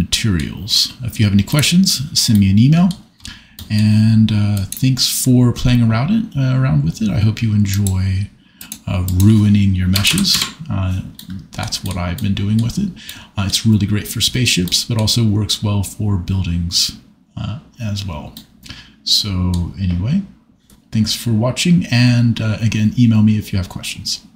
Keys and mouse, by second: 1.5 click, 2.3 middle click, 4.6 click, 8.6 click, 9.0-10.3 drag, 13.0 middle click, 18.3 middle click.